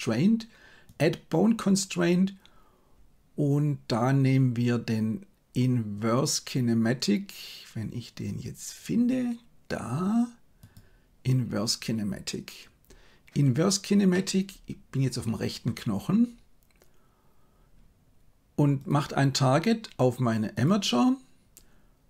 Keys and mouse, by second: 0.8-10.7 drag, 14.0-15.5 middle drag, 18.7-20.6 drag.